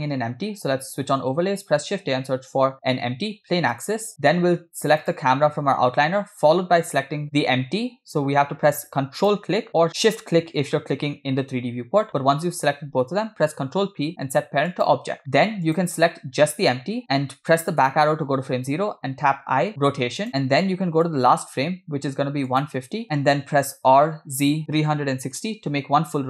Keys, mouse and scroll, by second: 0.0 click, 1.9 shift+a, 5.0 click, 9.2 ctrl+click, 13.6 ctrl+p, 15.7 click, 18.0 Left, 19.8 i, 21.1 click, 22.7 click, 23.1 middle click, 23.1 scroll down 3, 24.1 r.